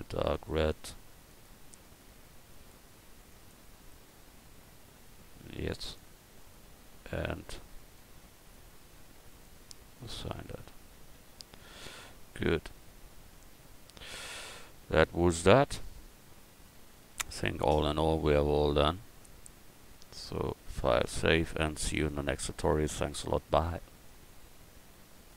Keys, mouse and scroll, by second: 5.8-7.7 drag, 6.4-8.3 right drag, 7.9-10.6 drag, 10.6 Tab, 11.1 a, 20.3-22.2 drag.